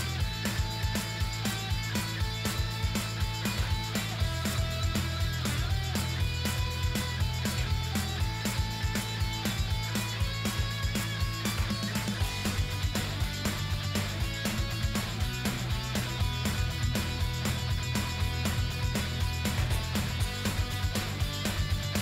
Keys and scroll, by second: 1.0 shift+b.